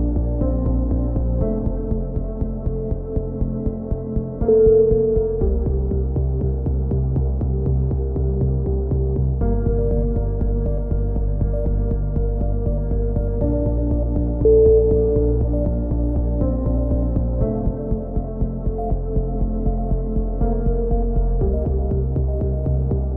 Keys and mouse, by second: 0.2 click, 0.7 middle click, 1.4 click, 1.9-3.8 right drag, 3.4 x, 4.4 a, 6.1 right click, 6.7 a, 7.9 ctrl+r, 8.3 click, 9.4-10.4 drag, 10.1 right click, 10.8 middle click, 11.4 click, 13.4 a, 13.4 middle click, 14.2 click, 16.1-17.6 middle drag, 17.7 k, 20.6 a, 22.4-23.1 middle drag.